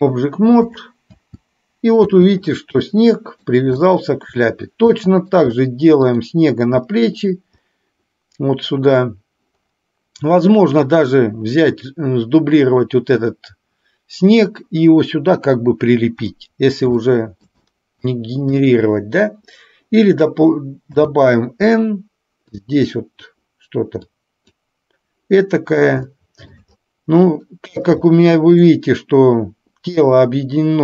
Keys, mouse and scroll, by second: 0.8 click, 1.1 space, 2.9-3.5 middle drag, 3.9-4.4 shift+middle drag, 5.0 middle click, 6.0 click, 7.0-7.4 middle drag, 16.4-16.9 middle drag, 17.1-17.5 shift+middle drag, 17.8 middle click, 18.6 click, 20.9 n, 22.5 click, 24.1 click, 26.1-26.6 shift+middle drag, 27.5-27.9 middle drag, 28.1-28.8 shift+middle drag.